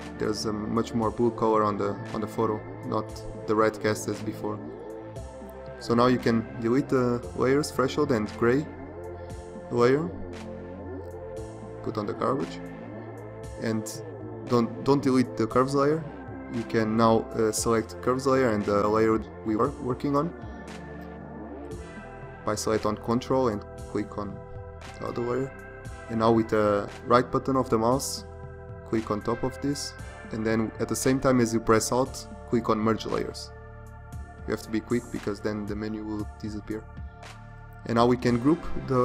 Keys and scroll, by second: 10.0 Delete.